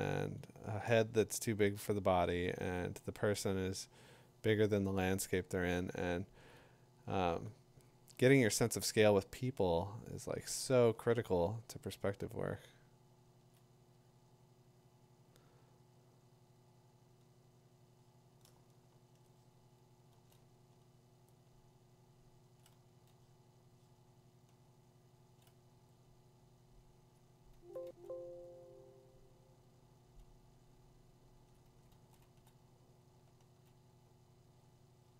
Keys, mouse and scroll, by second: 0.6 click, 0.8 2, 2.7 ], 3.2 click, 3.2 2, 6.5 click, 8.1 click, 10.5 [, 13.5 click, 18.4-19.3 ], 20.1 [, 21.4 click, 22.6 click, 24.9 click, 27.5 click, 27.8 2, 28.9 [, 31.1 click, 31.5 click.